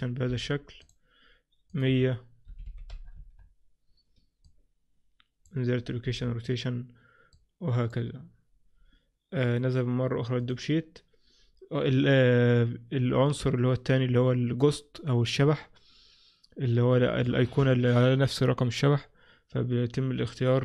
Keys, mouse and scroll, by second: 0.1 scroll up 1, 1.8 click, 4.5 click, 7.4 click, 9.5 click, 13.3 click.